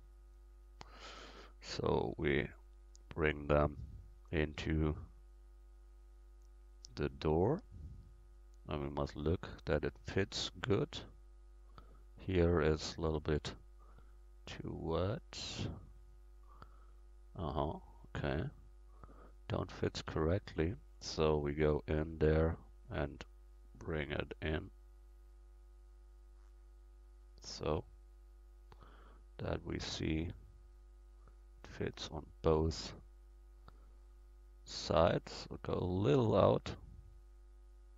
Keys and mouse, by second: 0.3 ctrl+z, 1.3-6.2 drag, 6.5 click, 10.0-11.9 middle drag, 13.5-16.1 drag, 16.4-21.9 middle drag, 20.0 Tab, 21.9 a, 23.0-24.9 drag, 27.7 Tab, 32.2-34.8 middle drag, 36.0 Tab, 37.2-37.9 drag.